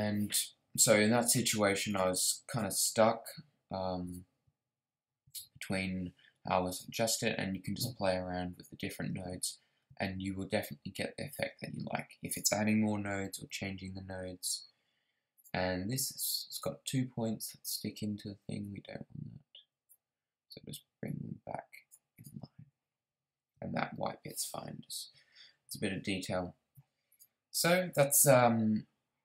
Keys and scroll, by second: 13.2 Down.